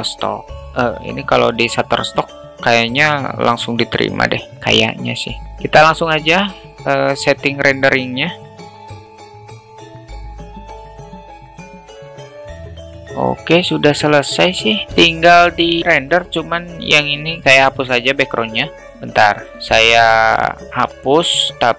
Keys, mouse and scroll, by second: 8.4 click, 12.5 click, 15.1 click, 18.1 Delete, 18.8 ctrl+z.